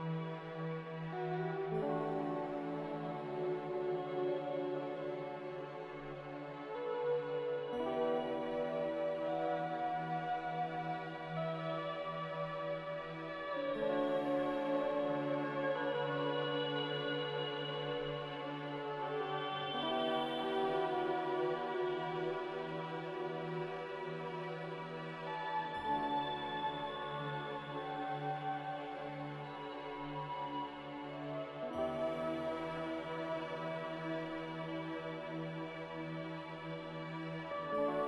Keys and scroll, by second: 0.0-0.1 typing, 1.2 c, 3.1-6.5 typing, 17.5 z, 18.1 g, 19.5 z, 20.0 g, 21.4 z, 28.6-29.4 typing.